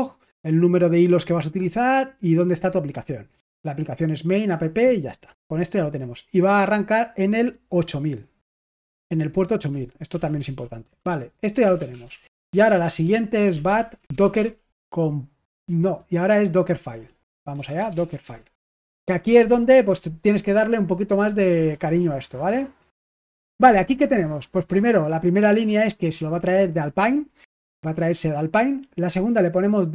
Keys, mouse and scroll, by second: 7.7 click, 10.1-14.6 typing, 16.2-18.5 typing, 18.6 Return, 21.9-22.7 typing.